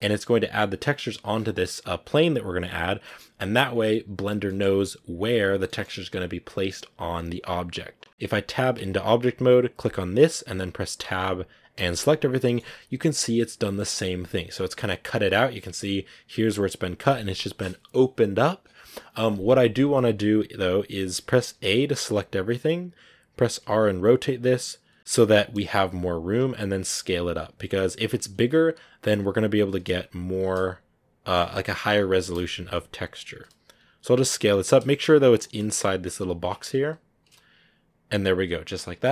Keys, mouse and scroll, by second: 9.0 Tab, 10.1 right click, 10.9 Tab, 11.6 a, 11.8 a, 38.5-39.1 scroll down 2.